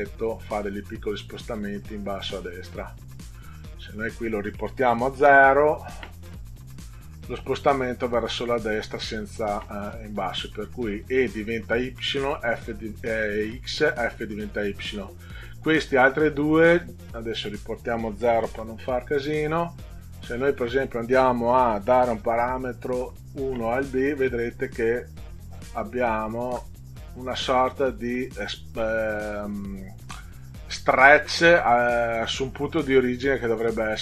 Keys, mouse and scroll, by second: 0.2 click, 0.7 click, 1.2 click, 1.6 click, 2.1 click, 3.8 click, 5.2 0, 6.8 click, 7.3 click, 7.7 click, 7.9 click, 8.2 click, 8.4 click, 8.7 click, 8.9 click, 17.3 click, 18.5 0, 20.5 click, 23.1 1, 24.3 click, 25.9-26.3 ctrl+scroll down 2, 27.7 middle click.